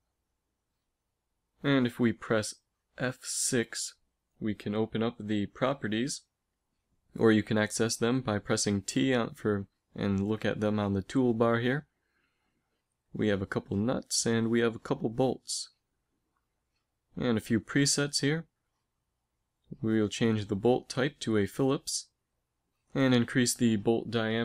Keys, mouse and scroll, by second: 2.1 n, 2.9 n, 3.5 t, 4.9 click, 5.0 click, 10.0-11.7 drag, 11.8-13.7 drag, 14.4-16.1 drag, 16.2-18.0 drag, 18.4-20.5 drag, 22.4-24.4 drag.